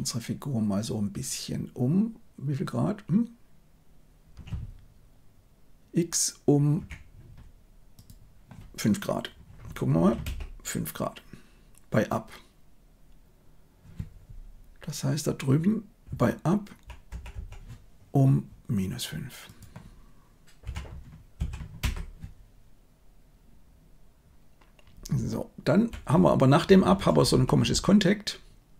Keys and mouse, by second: 7.9-10.2 drag, 16.0-16.8 Right, 17.0 Right, 17.3 Right, 19.4-21.8 drag, 25.1 Left, 25.6 Left, 25.7 Left, 25.7 Left, 26.1 Left, 26.1 Right, 26.6 Right, 26.7 Right, 26.9 Right, 27.1 Right, 27.2 Right, 27.4 Right, 27.6 Right.